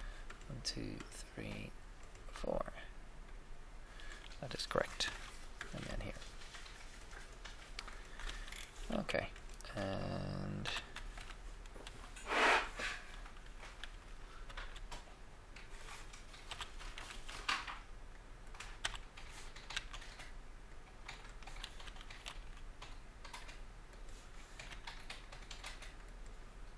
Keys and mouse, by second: 3.1 right click, 3.3 right click, 5.0 f, 5.6 f, 8.2 f, 8.3 f, 10.7 e, 11.1 Escape, 11.7 s, 11.9 s, 13.7 g, 13.8 g, 14.4 x, 16.5 e, 16.9 Escape, 17.3 s, 18.7 e, 18.9 e, 19.7 x, 21.8 e, 21.9 e, 22.2 x, 24.6 s, 24.8 s.